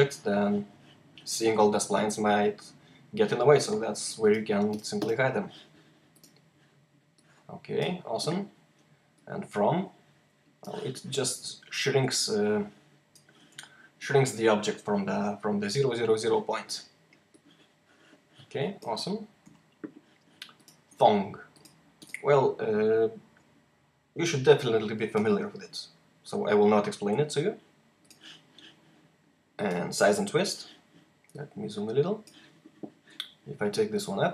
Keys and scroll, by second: 19.3 h.